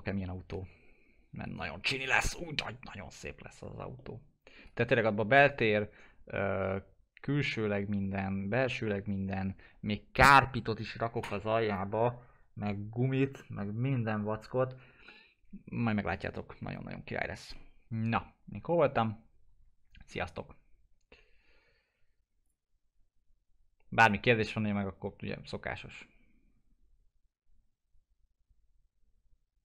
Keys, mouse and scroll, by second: 3.7 F4, 3.9-22.4 alt+middle drag, 22.4 click.